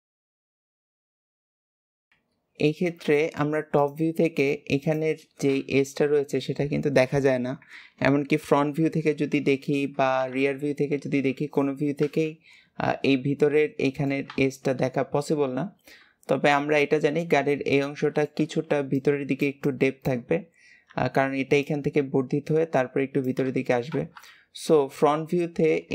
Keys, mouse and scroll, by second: 0.3 shift+middle click, 0.8 click, 2.0 alt+z, 2.6-3.1 scroll down 1, 3.1 shift+middle click, 3.7 shift+click, 4.3 shift+click, 4.7 shift+click, 5.9 KP_7, 10.3 ctrl+KP_3, 11.9 KP_1, 13.5-16.0 middle drag, 16.0 scroll up 2, 16.9-17.8 scroll down 2, 17.8-23.3 middle drag, 24.1 KP_1, 24.8-25.9 scroll up 2.